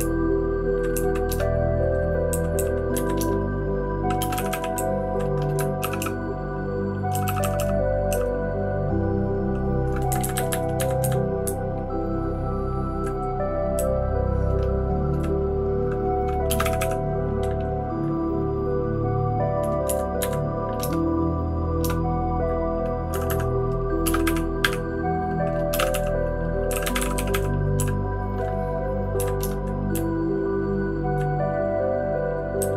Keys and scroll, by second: 0.5 Down, 0.9 Down, 1.3 Return, 2.3 Down, 2.5 Down, 2.9 Down, 3.3 Return, 4.2 space, 4.3 e, 4.5 e, 4.7 Down, 5.8 shift+], 6.0 shift+], 7.1-8.1 typing, 10.2 Up, 10.3 Up, 10.4 Up, 10.8 Up, 11.0 Up, 11.4-12.9 Right, 13.7 Down, 14.2-15.1 Down, 16.5 space, 16.6 e, 16.8 e, 20.2 Up, 20.8 Return, 21.8 Return, 23.1 Escape, 23.3 Escape, 24.0 space, 24.2 e, 24.6 Escape, 24.6 space, 24.6 e, 25.7-28.3 typing, 29.1 Down, 29.6 Return, 29.6-31.6 typing, 32.6 Down, 32.7 Down.